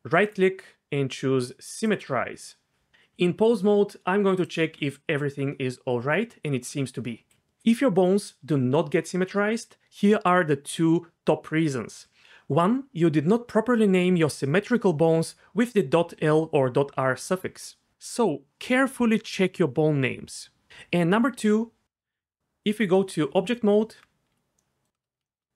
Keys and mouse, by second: 0.4-1.9 drag, 3.1 Tab, 4.4 click, 4.6 g, 22.4 Tab, 22.8 Tab.